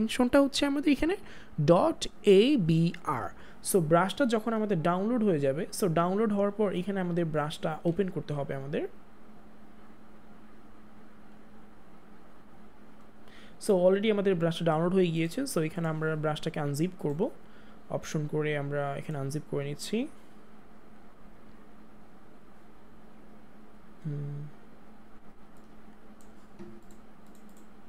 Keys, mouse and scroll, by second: 15.1 Return, 17.0 right click, 19.0 click, 27.5 right click.